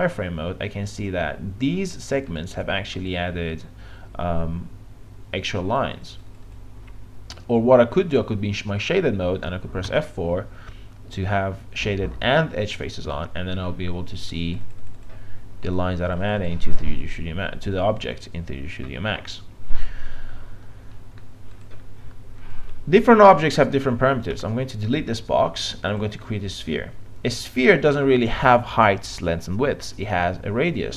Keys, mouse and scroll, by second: 2.3-4.6 right drag, 5.6 click, 7.0 F3, 9.9 F4, 14.4 click, 16.5 click, 24.3 Delete, 25.9-30.9 drag.